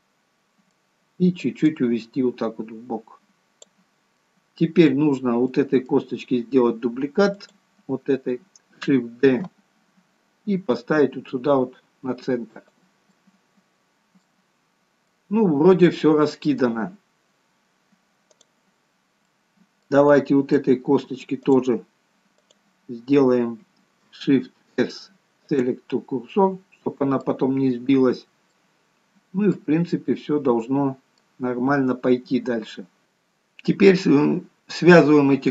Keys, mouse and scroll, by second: 0.0 middle click, 1.7 click, 4.1 middle click, 5.0-5.4 scroll down 2, 5.4 middle click, 7.2 click, 9.4 shift+d, 13.1 middle click, 14.5-15.0 scroll up 1, 15.0 middle click, 15.0 scroll up 3, 19.0-19.6 scroll up 4, 19.2 middle click, 21.5 middle click, 21.5 click, 24.4 shift+s, 26.2 middle click, 27.5-28.1 scroll down 2, 28.5 middle click, 28.5 scroll down 1, 29.8 scroll down 1, 30.1 middle click, 31.4 scroll down 1, 33.0 click.